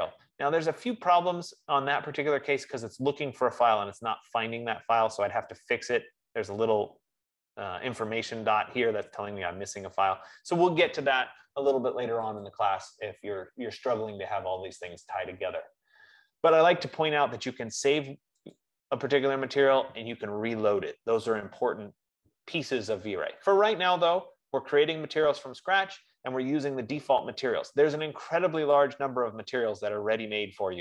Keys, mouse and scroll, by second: 12.7-17.8 drag, 19.0-23.8 drag, 29.2 click, 30.3-30.8 scroll.